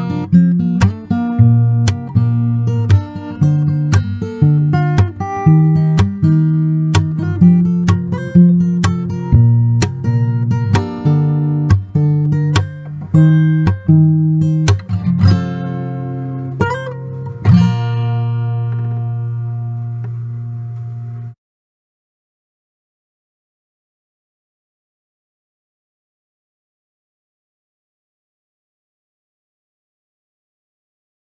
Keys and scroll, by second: 0.9-1.8 typing, 3.3 Escape, 3.6 Escape, 6.3 Escape, 8.8 Escape, 11.3 m, 11.5 space, 15.9 shift+Escape, 17.7 m, 17.8 Escape, 17.8 space, 18.6 Escape, 20.5 Escape, 22.1 Escape, 24.1 Escape, 29.0 shift+Escape, 30.8 shift+Escape.